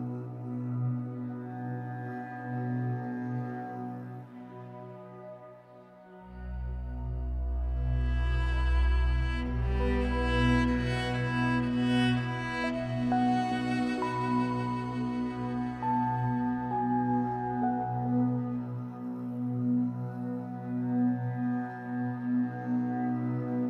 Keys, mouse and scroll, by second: 1.1 click, 2.0 g, 2.9 click, 3.5 g, 4.0 click, 4.6 g, 5.6 click, 6.2 g, 6.9 click, 7.6 g, 8.8 click, 10.0 g, 10.8 click, 11.4 g, 12.6 click, 13.3 ctrl+r, 14.1 click, 14.6 g, 15.3 click, 16.7 ctrl+r, 18.1 click, 18.9 g, 19.9 click, 20.5 g, 21.3 click, 22.0 g, 23.1 click, 23.3-23.6 middle drag.